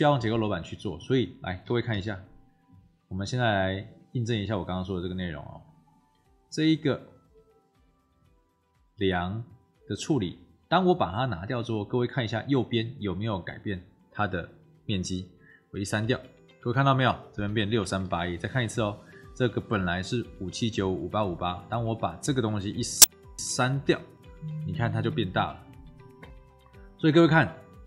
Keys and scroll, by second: 1.6 w, 1.8 t, 15.9 Delete, 18.0 ctrl+z, 23.2 Delete, 25.6 F1.